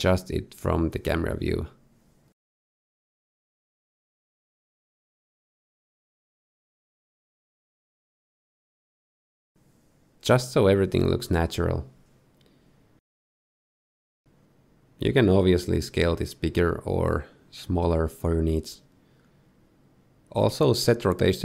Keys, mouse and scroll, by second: 2.2 KP_0, 3.3 click, 10.6 shift+click, 10.7 scroll down 1, 10.8 click, 11.0 shift+f, 11.7 shift+click, 14.5 middle click, 14.7-15.9 scroll down 9, 15.3 middle click, 15.9 s, 18.2 shift+middle click, 19.2-19.9 scroll up 4.